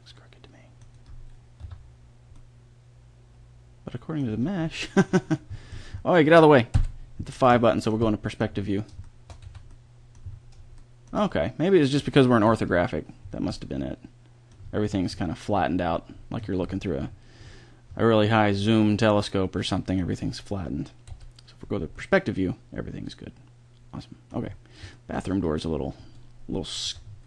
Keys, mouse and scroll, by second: 0.9 click, 1.6 Tab, 4.2 Tab, 6.7 KP_5, 9.4 a, 11.2 drag, 11.4-11.8 middle drag, 12.4 KP_5, 16.4 middle click, 17.5-18.2 middle drag, 21.0 KP_5, 22.9-23.3 middle drag, 26.0 Tab, 26.8 Tab.